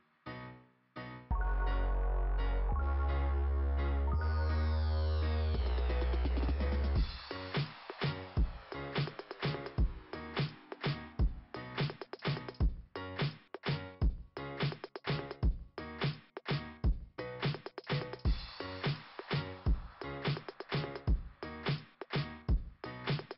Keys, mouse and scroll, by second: 0.9 right click, 3.2 click, 3.5 click, 3.6 click, 4.9 click, 5.2 click, 5.3 double click, 6.2 double click, 6.6 double click, 6.7-8.9 typing, 11.4 Return, 14.4 click, 14.6 click, 15.9 click, 17.4 click, 18.9 click, 23.0 click, 23.2 click.